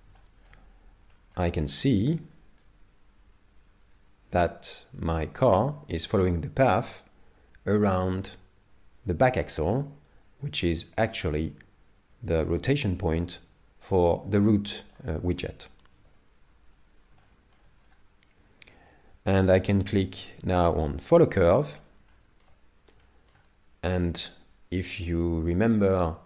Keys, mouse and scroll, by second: 0.2 shift+middle click, 0.6-1.1 scroll down 2, 1.1 shift+middle click, 2.6 click, 16.0 KP_7, 17.2 shift+middle click, 17.8-19.1 scroll up 3, 21.1 click, 22.1 shift+middle click, 23.0 shift+middle click.